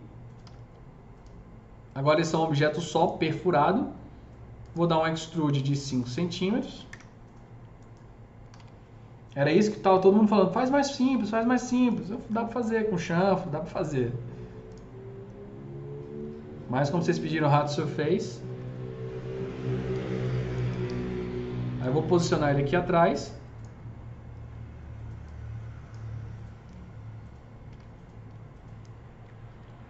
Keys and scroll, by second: 0.3 e, 3.4 w, 6.7 KP_5, 6.7 Return, 8.1-9.0 typing, 12.0 F3, 18.0 F2, 18.4 F3, 19.9 s, 20.5 t, 20.8 z, 27.1 f, 27.6 z.